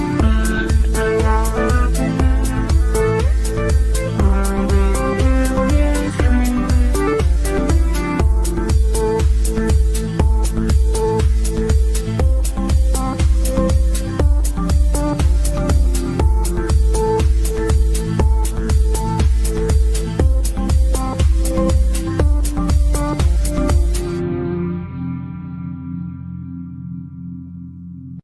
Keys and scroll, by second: 1.6 Delete, 9.4 g.